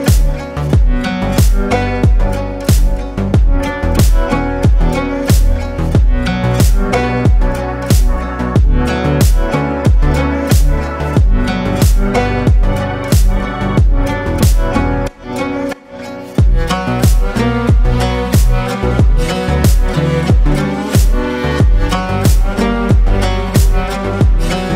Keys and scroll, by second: 12.3 ctrl+space.